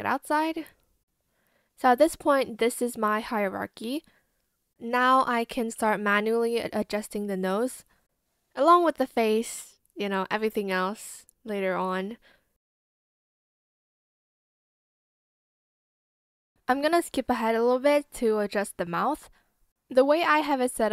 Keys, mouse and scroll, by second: 1.3 ctrl+click, 6.4 shift+click, 6.5 shift+z, 7.3 shift+click, 7.4 ctrl+z, 7.4 shift+click, 7.5 shift+click, 7.7 shift+click, 7.8 shift+click, 8.1 shift+click, 8.2 shift+click, 8.3 shift+click, 9.1 shift+click, 10.3 b, 10.5 ctrl+z, 11.2 ctrl+shift+z, 11.8 shift+click, 12.0 ctrl+shift+z, 12.1 b, 12.8 ctrl+z, 12.9 shift+click, 13.0 shift+click, 13.3 shift+z, 13.4 Escape, 14.0 ctrl+z, 14.0 shift+scroll, 14.1 Escape, 14.6 shift+click, 15.0 ctrl+z, 15.0 click, 15.1 shift+click, 15.2 shift+click, 15.3 shift+click, 15.5 shift+click, 16.0 ctrl+z, 20.6 ctrl+click.